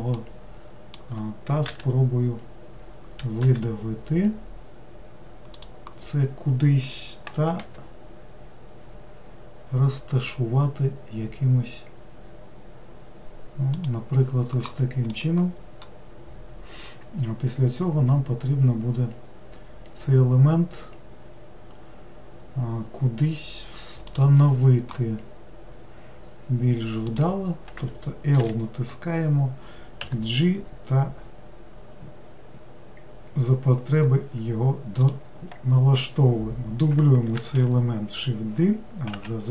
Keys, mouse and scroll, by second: 0.2-1.7 shift+middle drag, 1.7 e, 7.7 g, 27.1 click, 28.4 l, 30.1 g, 37.4 shift+d.